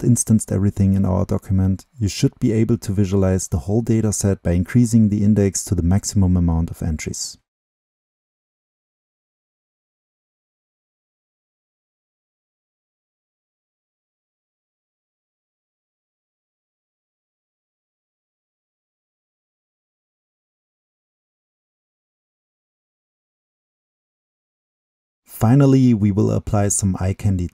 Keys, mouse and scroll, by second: 11.5 right click, 20.6 right click, 20.6-22.6 drag, 23.2 middle click, 23.5-24.3 drag, 25.2 click.